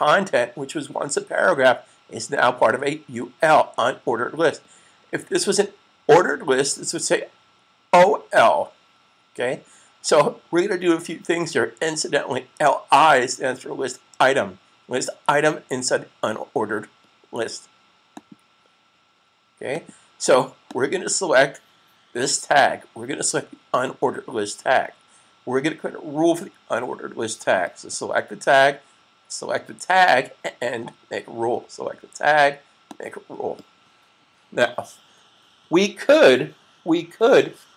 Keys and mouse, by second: 18.0 click, 23.6 click, 32.6 click.